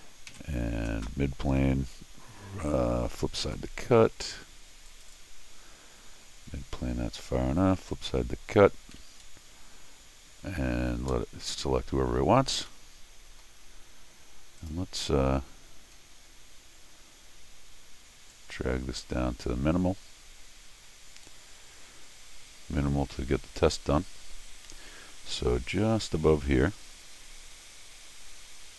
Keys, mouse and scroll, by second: 0.3 alt+x, 3.4 click, 4.9 click, 5.1 click, 7.9 click, 12.7 middle click, 13.7 middle click, 14.6 click, 16.0 scroll down 1, 18.3-28.7 drag.